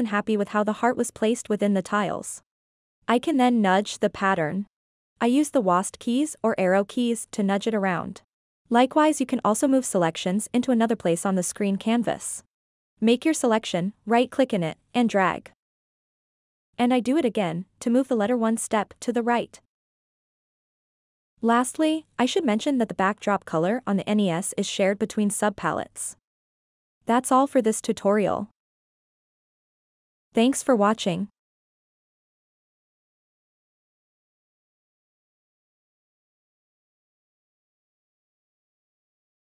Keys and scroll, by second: 3.4-7.5 typing.